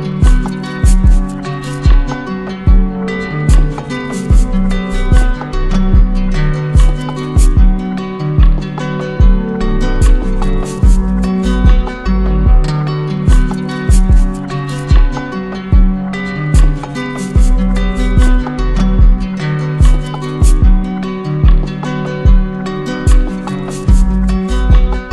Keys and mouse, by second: 1.0-2.1 drag, 4.8-5.9 drag, 8.4-9.5 drag, 11.7-12.7 drag, 18.4-19.5 drag, 21.0-22.1 drag.